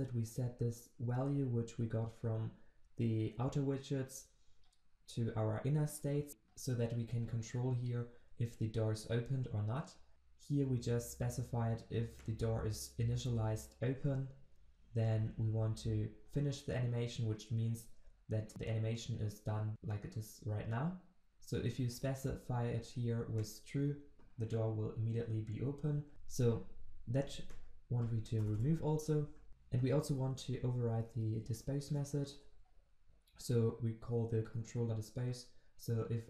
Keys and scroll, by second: 29.5 ctrl+z, 32.3 ctrl+v.